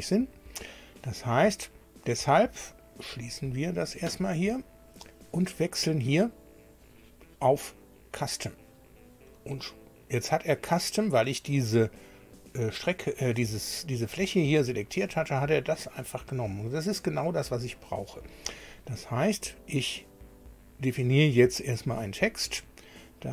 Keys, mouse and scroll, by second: 3.2 click, 6.8 click, 9.3-11.9 middle drag, 14.1 middle click, 15.2-17.6 middle drag, 17.7 middle click, 21.8 click.